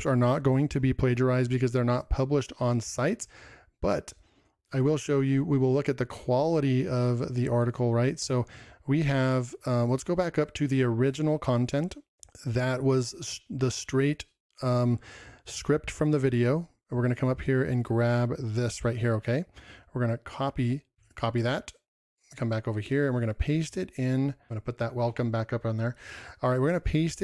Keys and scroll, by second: 14.4 ctrl+m.